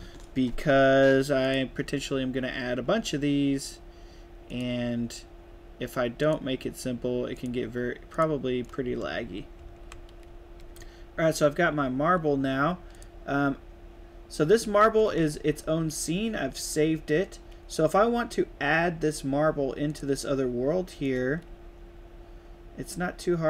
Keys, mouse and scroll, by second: 1.4 click, 4.4 click, 6.1 click, 7.3 click, 8.1 click, 8.6-10.5 typing, 8.6-10.8 right drag, 12.8 click, 15.0 ctrl+s, 21.0-23.4 right drag, 21.4 a.